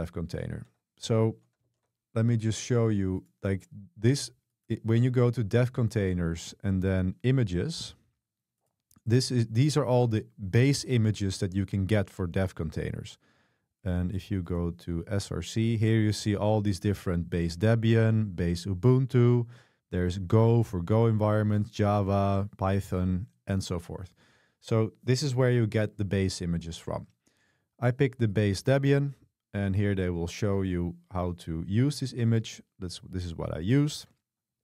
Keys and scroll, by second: 0.6 super+3, 1.7 super+1.